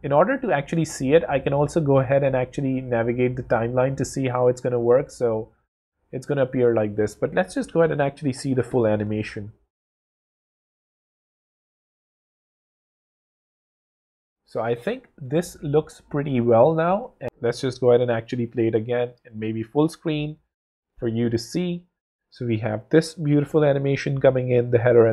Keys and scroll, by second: 6.4 w, 19.3 alt+super+f, 20.2 alt+super+w.